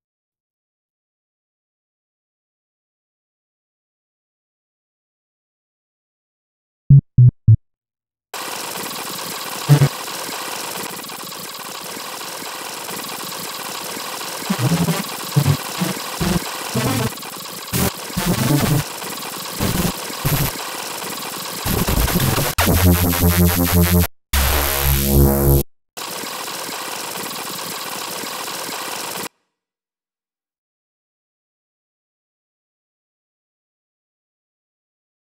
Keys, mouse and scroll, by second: 0.0 click, 3.3 click, 4.8 click, 6.7-7.5 drag, 8.3 click, 8.9 click, 9.2 click, 9.5 click, 9.6 click, 9.9 click, 10.0 right click, 10.1 click, 10.3 click, 10.6 click, 10.8 click, 11.0 click, 11.2 click, 11.4 click, 11.6 click, 12.0 click, 12.2 click, 12.6 click, 13.1 click, 13.7-15.0 scroll up 5, 15.3 scroll up 1, 15.6 click, 15.7 click, 15.9 click, 16.1 click, 16.4 click, 16.7 click, 17.1 click, 17.5 click, 17.7 click, 17.9 click, 18.1-18.8 drag, 19.0 click, 19.4 click, 19.5 click, 20.0 click, 20.2 click, 20.6 click, 21.1 click, 21.2 click, 21.4 click, 21.6-24.0 drag, 24.1 click, 26.0 click, 26.4 click, 26.5 click, 26.6 click, 26.9 d, 27.1 r, 27.3-27.6 scroll down 4, 27.6 click, 27.8 click, 28.2 click, 28.3 click, 28.7 click, 29.9 click, 31.7 click, 32.6-33.6 drag, 33.7 click, 34.4 click.